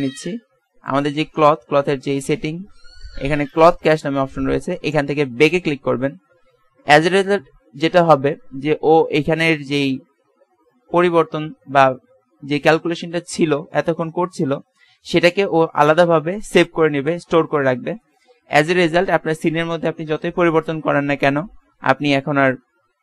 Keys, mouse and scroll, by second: 0.8-1.9 drag.